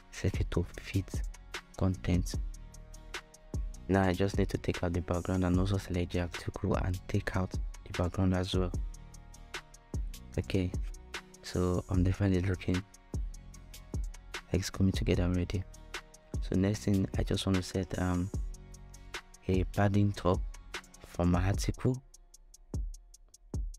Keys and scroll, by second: 18.7-19.6 typing.